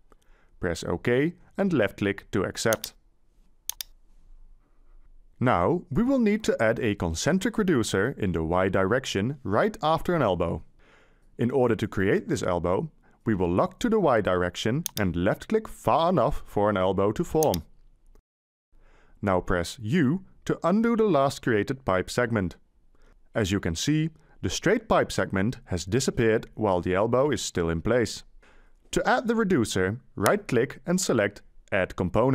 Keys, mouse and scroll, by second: 19.7 u.